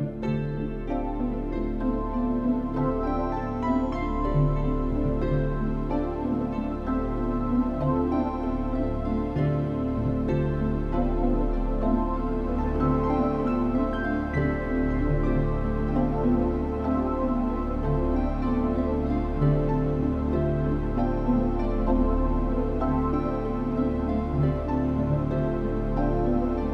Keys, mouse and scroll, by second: 4.1 a, 4.4 a, 4.6 middle click, 5.8 middle click, 7.1 KP_1, 7.9 b, 8.8 right click, 9.2 click, 9.4 b, 10.2 middle click, 12.6 u, 14.6 click, 15.5 click, 16.0 click, 19.8 Escape, 19.8 scroll down 2, 21.1 click, 21.5 click, 22.6 click, 23.8 click.